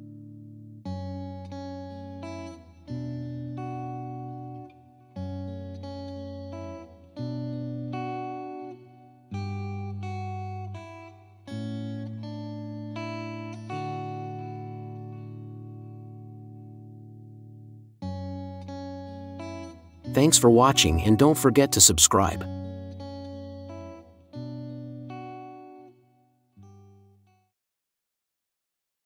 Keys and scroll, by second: 0.0-3.4 typing, 5.6 ctrl+z, 5.9 Caps_Lock, 6.6 [, 7.9 [, 8.4 ctrl+z.